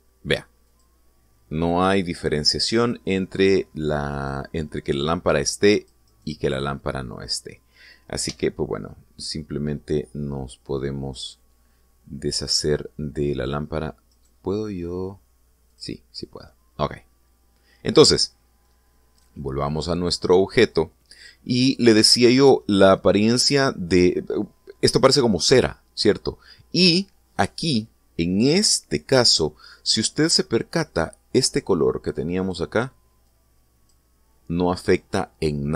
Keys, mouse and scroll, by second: 0.1 click, 1.5 click, 2.5 click, 3.5 click, 4.9 click, 6.5 click, 6.8 right click, 9.1 x, 11.9 right click, 14.9 right click, 16.5 click, 18.1-18.5 scroll down 1, 19.0-19.6 middle drag, 19.9 right click, 22.1-22.4 scroll up 1, 22.9 shift+middle click, 23.7-24.4 middle drag, 25.3 scroll up 1, 29.7 scroll up 1, 30.7 scroll down 1, 33.2 click, 34.1 click.